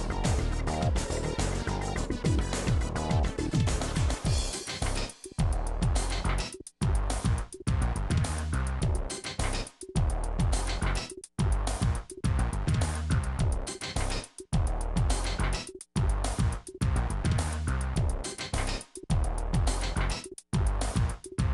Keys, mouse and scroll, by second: 1.4 click, 3.1 click, 3.3-4.6 middle drag, 4.6 click, 5.3 scroll up 2, 5.4 click, 5.7 2, 5.8-8.6 shift+drag, 8.7 s, 9.8-10.8 middle drag, 10.8 s, 15.3 shift+click, 16.0 middle click, 16.6 click, 16.8 middle click, 17.8-21.5 drag.